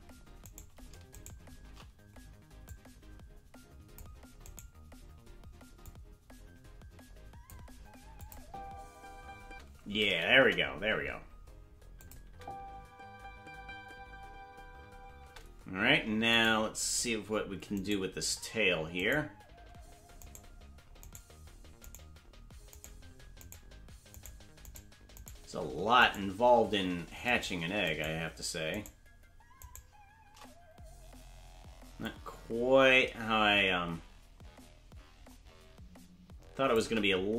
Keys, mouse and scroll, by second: 0.6 right click, 1.4 shift+right click, 2.7-4.0 drag, 4.7 right click, 5.8-7.5 drag, 8.2 click, 8.4 space, 9.4 space, 10.4 KP_0, 12.0 click, 12.2 space, 15.3 space, 16.6 right click, 19.2-20.4 shift+right drag, 32.0-35.6 drag.